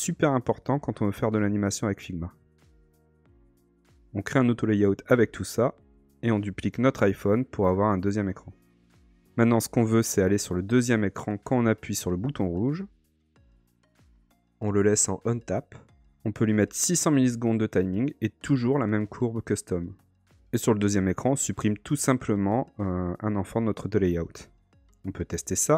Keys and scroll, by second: 3.3 shift+a.